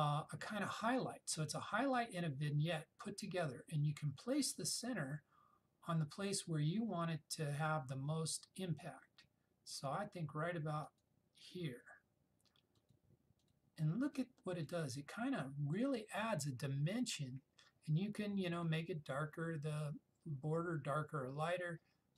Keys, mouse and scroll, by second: 4.9 click, 10.9 click, 18.7-21.5 drag.